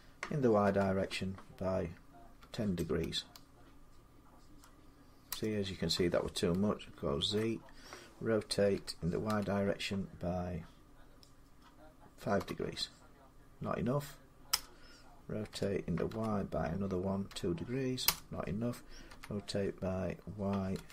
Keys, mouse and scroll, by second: 0.5 y, 2.2-2.7 typing, 5.1 Return, 7.0 ctrl+z, 8.5-9.1 typing, 12.2 5, 14.3 Return, 15.3-15.9 typing, 17.1-19.5 typing, 20.6-20.9 typing.